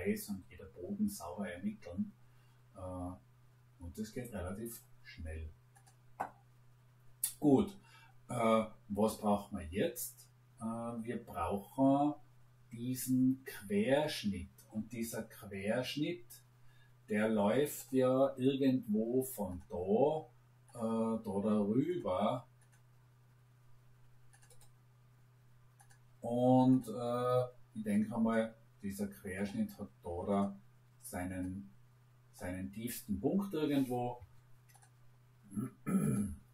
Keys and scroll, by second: 34.1 Escape.